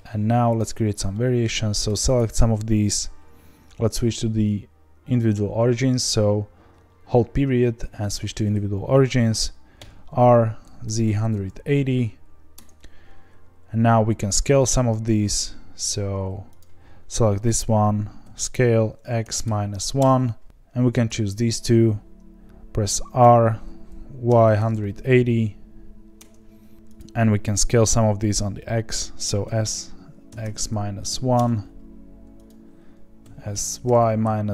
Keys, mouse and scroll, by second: 0.5 click, 1.1-2.1 middle drag, 2.1 shift+click, 9.8 r, 16.5 click, 18.2 s, 20.4 click, 21.3 shift+click, 23.2 r, 26.7 click, 26.9 click, 29.4 s, 32.4 click, 33.2 s.